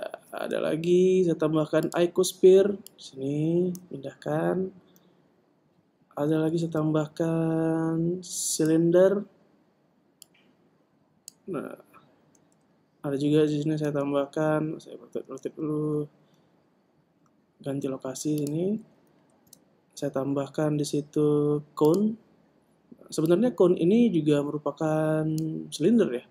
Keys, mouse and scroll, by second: 0.5 shift+a, 3.2 click, 6.9 shift+a, 10.6 click, 13.5 shift+a, 18.8 click, 19.6 shift+a, 23.7 click.